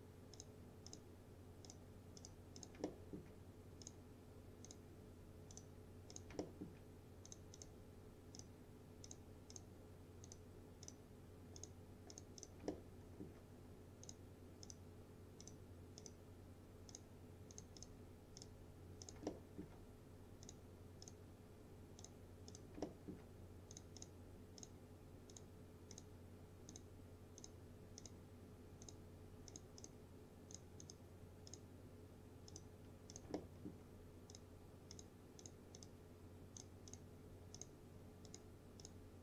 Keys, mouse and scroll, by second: 2.9 alt+middle click, 3.9 click, 6.5 alt+middle click, 7.3 click, 12.8-13.4 alt+middle drag, 14.1 click, 19.2 click, 19.3-19.9 alt+middle click, 20.5 click, 22.9 alt+middle click, 23.8 click, 33.4-34.0 alt+middle click, 34.4 click.